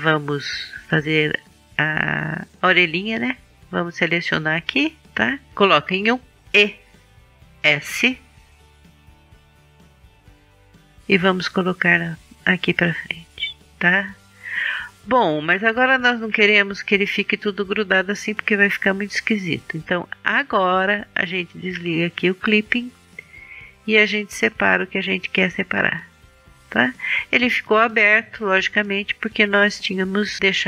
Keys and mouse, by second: 2.5 right click, 3.8 right click, 5.7 KP_1, 6.9 e, 8.2 s, 9.0-11.1 middle drag, 13.0-15.8 middle drag, 24.3-26.3 drag, 27.8 click, 28.6-30.6 middle drag.